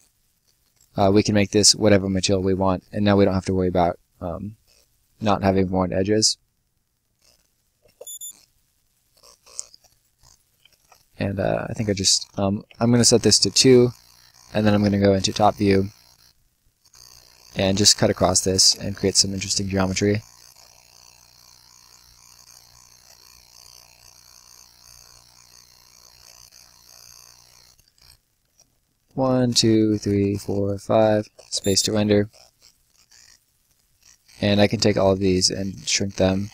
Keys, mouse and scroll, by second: 0.3 scroll down 1, 0.5 right click, 0.9-1.4 scroll down 1, 1.9 right click, 2.2-2.6 scroll up 1, 2.6 middle click, 2.8-3.7 scroll up 1, 4.5 right click, 7.1 click, 7.8 space, 9.0 right click, 9.7-10.0 scroll up 1, 10.0 middle click, 10.7 ctrl+z, 11.6 right click, 12.1 click, 13.2 scroll down 1, 13.5 right click, 13.8 middle click, 15.0 click, 15.6 scroll down 1, 15.7 middle click, 16.7 middle click, 17.5 shift+click, 18.9 click, 22.7 click, 24.0 shift+click, 26.2 ctrl+shift+click, 27.2 Escape, 27.5 click, 28.7-31.3 typing, 29.2 click, 29.6 click, 30.0 click, 30.4 click, 31.7 scroll down 1, 32.2 right click, 32.4 scroll down 1, 32.7 right click, 33.6 scroll down 1, 33.8 middle click, 34.5 click, 34.9 shift+click, 36.4 shift+click.